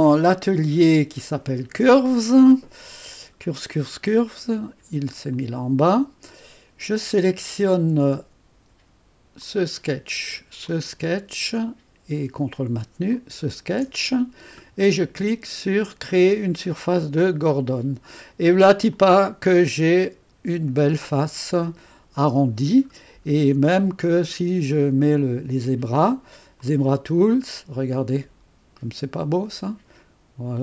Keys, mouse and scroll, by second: 0.0 click, 5.3 click, 9.4 click, 10.7 click, 13.2 click, 17.2 click, 18.9-22.9 drag, 22.9-23.5 scroll up 1, 26.6 click, 27.6-30.6 drag.